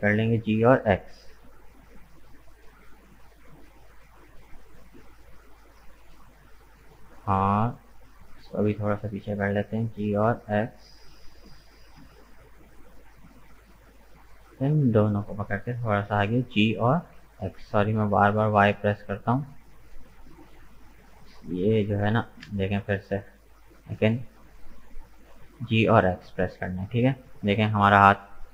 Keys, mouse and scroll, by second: 3.4-4.5 middle drag, 4.5-5.7 scroll up 1, 8.0 right click, 8.4-9.5 middle drag, 9.5 g, 12.6-14.2 middle drag, 14.2 right click, 15.3 shift+right click, 16.5 g, 19.6 middle click, 20.4 right click, 20.6-21.7 middle drag, 21.7 g, 25.3-28.5 middle drag.